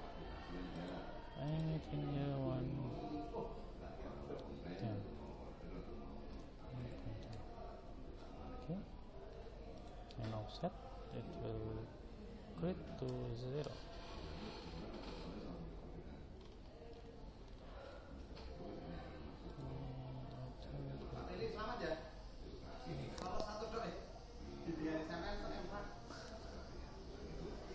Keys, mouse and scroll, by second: 4.8 BackSpace, 5.0 BackSpace, 9.8 click, 12.3 BackSpace, 16.4-19.6 middle drag, 19.6 click.